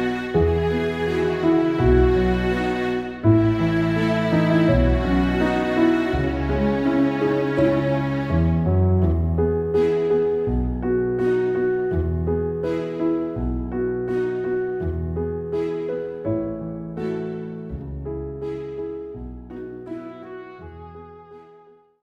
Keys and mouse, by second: 1.7 ctrl+z, 2.0 ctrl+z, 2.8 ctrl+z, 3.4 ctrl+z, 3.9 ctrl+z.